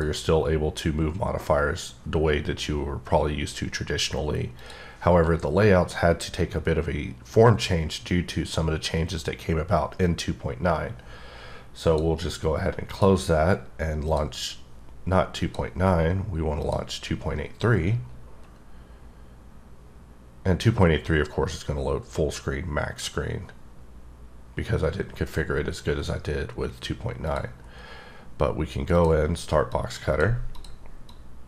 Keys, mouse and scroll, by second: 4.6 click, 11.8 click, 13.1 click, 14.1 click, 15.4 click, 16.7 click, 27.3 click, 27.6-28.9 scroll up 2, 28.9 scroll up 1, 29.0 click, 29.8 click, 30.6 click, 31.1 click.